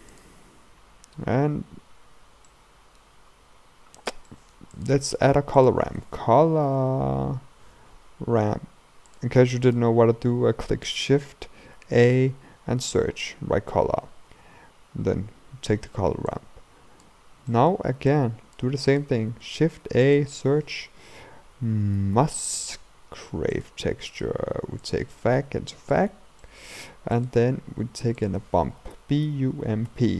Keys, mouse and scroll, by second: 0.3-17.1 drag, 18.1 click, 26.0-30.1 drag.